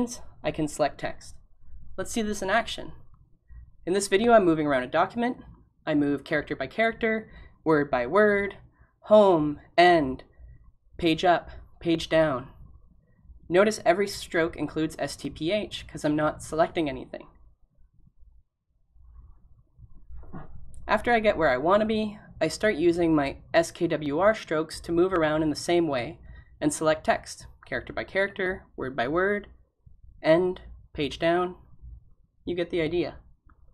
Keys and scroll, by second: 4.9 typing, 6.0-7.8 typing, 27.2 g.